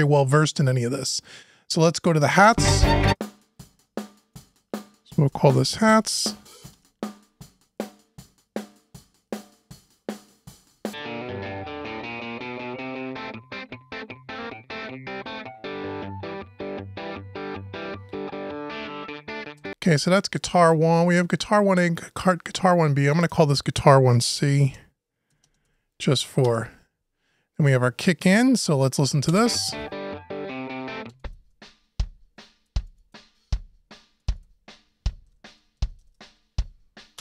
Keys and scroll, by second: 6.5 Return, 26.2 Return.